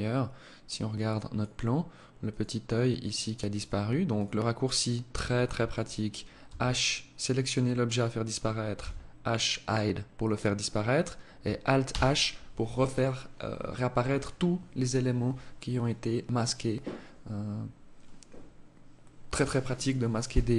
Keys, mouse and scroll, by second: 1.5 click, 2.2 click, 2.7 click, 3.3 click, 3.9 click, 5.7 h, 6.4 right click, 8.0 h, 11.0 alt+h.